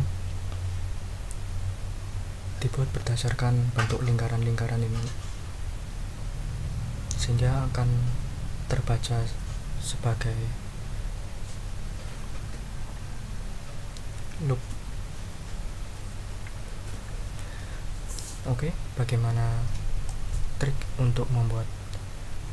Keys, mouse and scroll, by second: 20.0-22.5 drag.